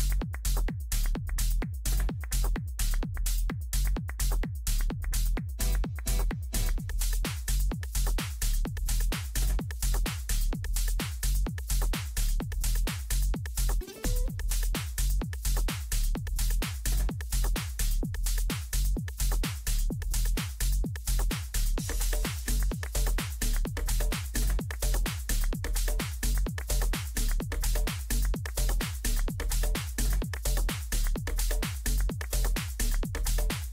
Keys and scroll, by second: 0.7 ctrl+Home, 11.4 c, 12.8 u, 14.3 Delete, 24.8 ctrl+z.